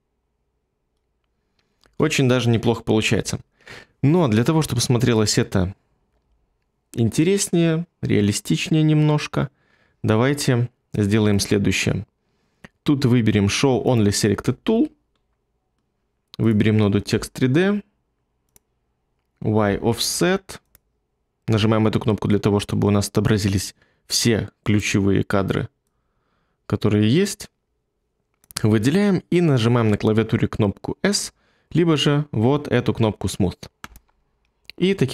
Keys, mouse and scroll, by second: 1.8 space.